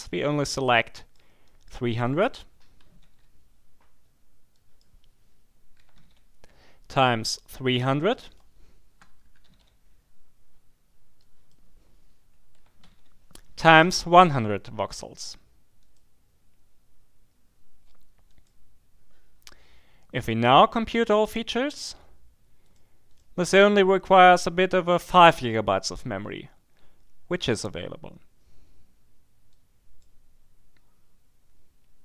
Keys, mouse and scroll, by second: 0.5-1.7 drag, 2.8 2, 3.1 0, 4.5 click, 5.5-6.4 typing, 8.0 click, 9.0-9.9 typing, 11.2 click, 12.5 5, 12.8 0, 15.8 click, 18.3 click, 20.5 click, 21.6 click, 22.7-23.7 drag, 29.5-30.5 drag.